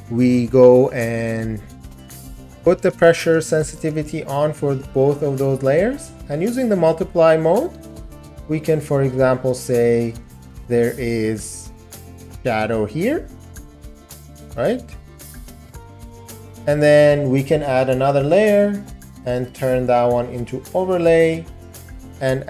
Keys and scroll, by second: 2.6 ].